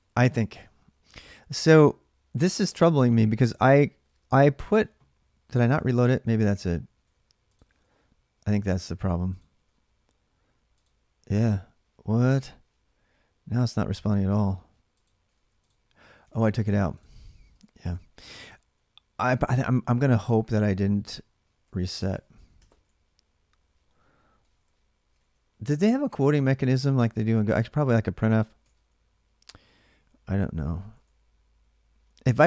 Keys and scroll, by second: 6.6-8.2 typing, 9.3 typing, 14.8-15.6 typing, 16.0 alt+Tab, 17.8 ctrl+[, 17.9 j, 18.0 j, 19.8-25.0 typing, 25.7 Left, 26.3-28.9 typing, 30.1-31.3 typing.